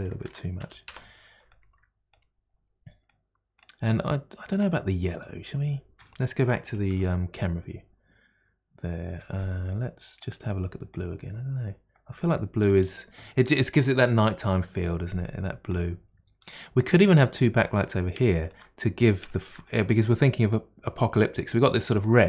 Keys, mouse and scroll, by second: 1.5-2.4 middle drag, 2.4-3.1 scroll up 6, 3.1-4.5 middle drag, 4.5 click, 5.5 click, 6.9 KP_0, 7.7-9.2 scroll up 1, 9.2-9.5 scroll up 1, 10.2 click, 10.9 click, 17.7-21.9 middle drag, 21.9 click.